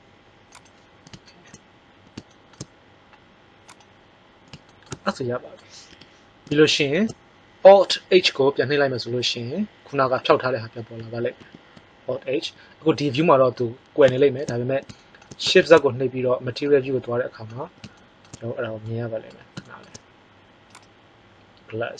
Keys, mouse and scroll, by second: 5.9 KP_1, 11.3 alt+h, 15.5 shift+z.